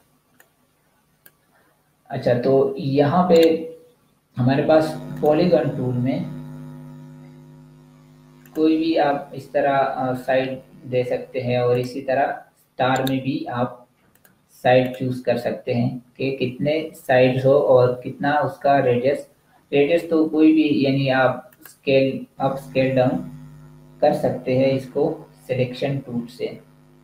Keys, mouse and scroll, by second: 3.1 right click, 5.0 click, 8.2 click, 11.7 click, 12.9 right click, 13.9 click, 21.4 click.